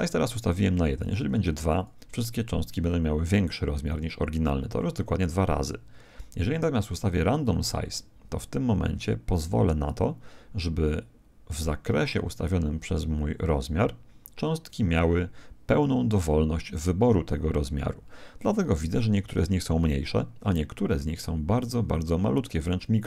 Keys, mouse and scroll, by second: 1.0 click, 7.4 click, 20.7-23.0 middle drag.